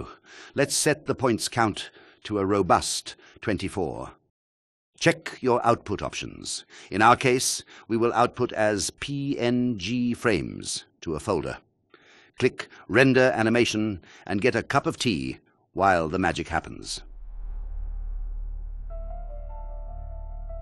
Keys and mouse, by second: 0.6 click, 6.2 click, 7.3 click, 12.7-13.9 drag.